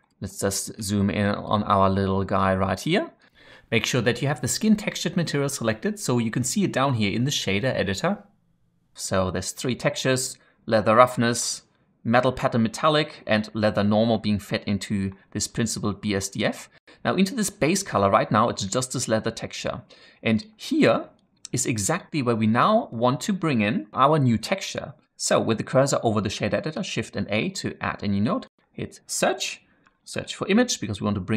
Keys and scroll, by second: 27.1 shift+a, 29.9 typing.